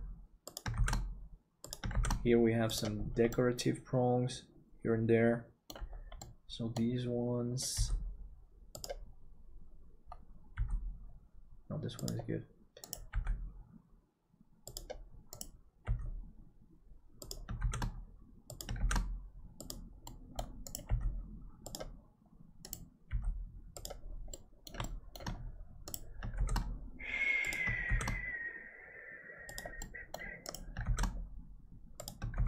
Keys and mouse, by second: 3.3-5.8 middle drag, 6.2 middle click, 7.7 g, 10.5 g, 12.8-14.7 right drag, 14.7 g, 17.3 g, 17.6 shift+d, 20.2 middle click, 20.8 g, 23.1 g, 24.4 middle click, 24.9 shift+middle click, 26.3 shift+d, 29.9 middle click, 31.0 shift+d.